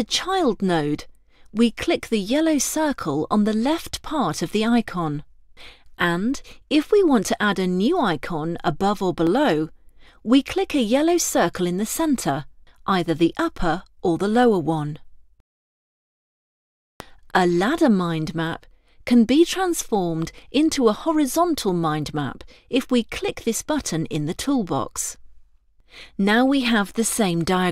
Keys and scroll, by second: 16.7 ctrl+z.